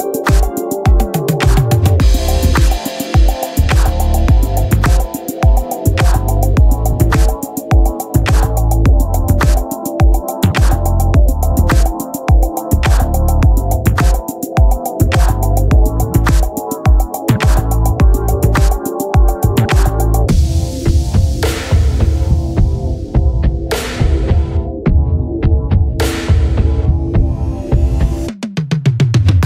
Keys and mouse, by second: 1.6 click, 5.5 click, 9.0 click, 12.4 click, 14.5 click, 18.4 click, 23.6 click, 26.2 click, 28.7 click.